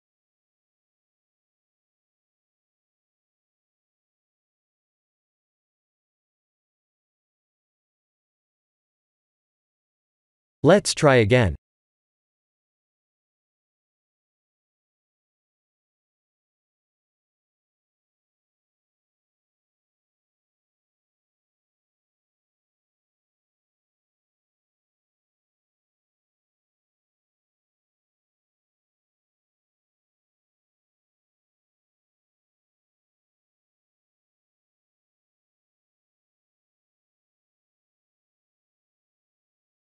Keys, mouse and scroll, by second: 0.3 scroll down 5, 0.6 Tab, 1.0 Tab, 1.4 click, 2.0 middle click, 3.5 middle click, 4.6-5.5 scroll up 10, 6.1 click, 6.6 Tab, 11.2 ctrl+z, 11.7 ctrl+z, 12.3 ctrl+z, 13.5 ctrl+z, 13.7 ctrl+z, 13.9 ctrl+z, 14.1 ctrl+z, 14.3 ctrl+z, 15.6 KP_1, 15.9 KP_7, 16.7 scroll down 2, 20.2 scroll down 2, 21.2 Tab, 21.2-22.6 scroll down 1, 22.6 shift+z, 23.9 c.